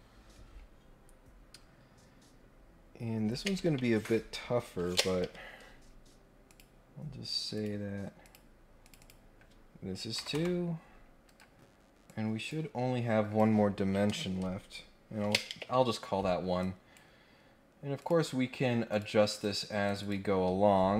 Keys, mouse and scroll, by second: 6.5 click, 7.5 click, 8.2 click, 8.8 click, 11.2 Escape, 12.0-13.4 drag, 16.6 right click, 17.9 click, 18.9 click, 19.3 click, 19.8 click, 20.0 click.